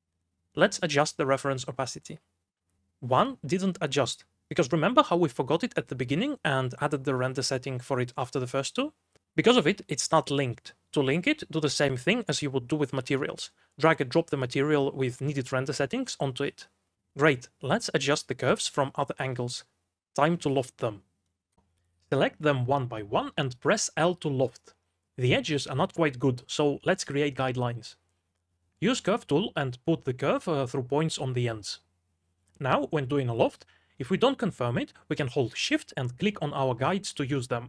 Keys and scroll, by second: 0.0-0.8 typing, 4.1 m, 18.6-20.6 typing, 22.1 2, 24.9 l, 30.8 x.